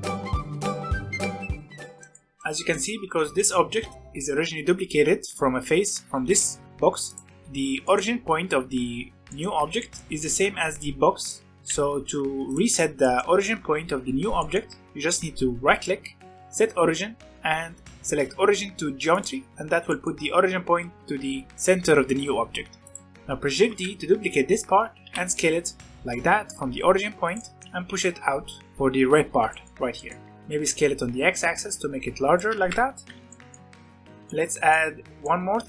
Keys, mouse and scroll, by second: 0.0 ctrl+r, 0.5 3, 0.5 middle click, 0.6 g, 1.0 click, 1.0 middle click, 1.2 g, 2.0-2.5 shift+middle drag, 2.5 scroll down 1, 2.7 middle click, 3.0 g, 3.9 click, 7.0 click, 7.4-9.0 middle drag, 9.0 scroll down 2, 9.2 middle click, 9.5 z, 9.7-10.4 middle drag, 10.4 Tab, 10.7 click, 11.0 Tab, 11.2 click, 11.5 Tab, 11.6 z, 12.0 Tab, 12.4 click, 12.7 scroll up 3, 13.0-15.7 middle drag, 15.7-19.2 right drag, 19.9-22.7 middle drag, 22.8 click, 23.0 middle click, 23.5 shift+d, 25.0 s, 27.3 middle click, 27.6 g, 28.6-29.4 scroll up 3, 29.4 shift+middle click, 30.2 s, 32.5 g, 33.2-35.6 middle drag.